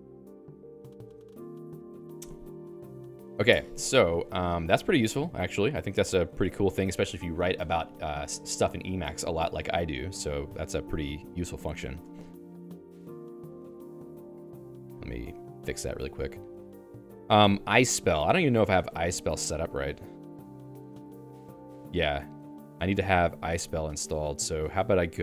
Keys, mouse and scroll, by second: 6.0 Return, 6.6 j, 6.8 j, 7.1 j, 8.8-20.7 typing, 17.1 ctrl+s, 17.4 Escape, 20.9 Return, 23.2 Escape.